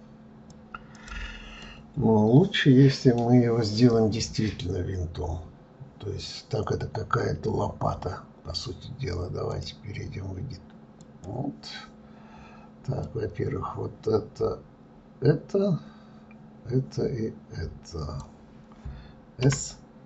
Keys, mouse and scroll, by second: 1.5-3.9 middle drag, 3.9-6.9 scroll up 1, 9.4-12.4 drag, 12.9-15.9 drag.